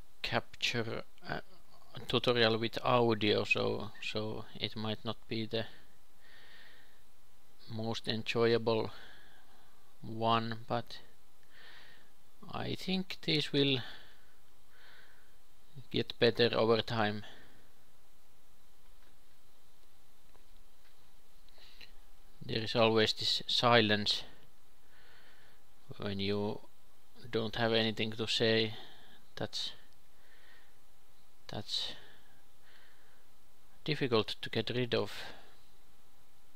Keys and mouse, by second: 0.9 ctrl+a, 1.8 Tab, 3.4 KP_2, 4.5-6.4 drag, 6.4 ctrl+b, 10.4 KP_3, 10.5-13.6 drag, 11.5 i, 16.8 e, 18.5 e, 19.4 s, 22.7 ctrl+r, 23.7 ctrl+r, 24.2 KP_3, 24.6 a, 25.3-27.2 drag, 25.3 a, 26.3 e, 28.2 KP_3, 28.3-30.1 drag, 30.1 p, 31.1 Tab, 31.7 Tab, 32.5 KP_3, 33.8 e, 35.7-36.5 typing.